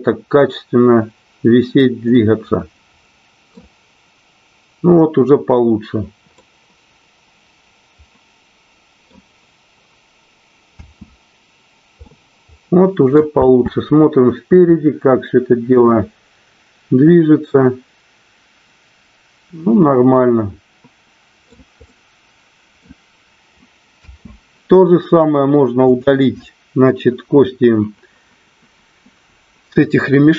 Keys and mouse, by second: 2.8-4.6 middle drag, 7.1-9.8 middle drag, 11.1 space, 11.9-13.0 middle drag, 13.4 space, 20.4-21.8 middle drag, 21.9-23.2 middle drag, 24.4 space, 25.8 click.